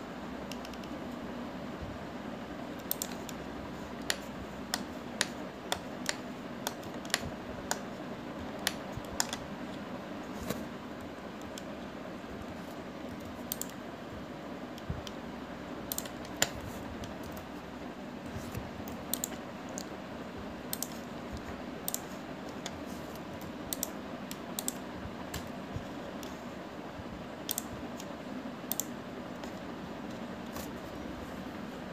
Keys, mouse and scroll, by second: 0.1 ctrl+r, 4.7-5.4 scroll down 1, 5.4-9.2 shift+middle drag, 9.2-9.9 scroll down 2, 9.9-11.1 shift+middle drag, 11.1-12.3 scroll up 1, 13.1-14.3 scroll up 1, 14.3 ctrl+r, 23.1-24.5 drag, 24.5 ctrl+r, 27.0-28.3 scroll down 3, 28.7-30.0 drag, 31.3 scroll up 1.